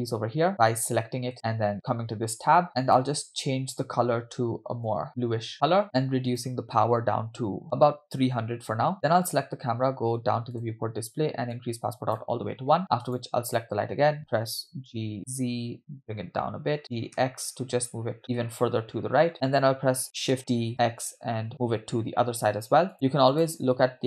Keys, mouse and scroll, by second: 1.7 click, 2.8 click, 6.3-7.6 drag, 7.6 0, 9.3 click, 10.6 click, 10.8-11.5 scroll down 1, 11.5 scroll down 1, 11.5 click, 13.0 click, 14.9 g, 20.3 shift+d, 23.3 click.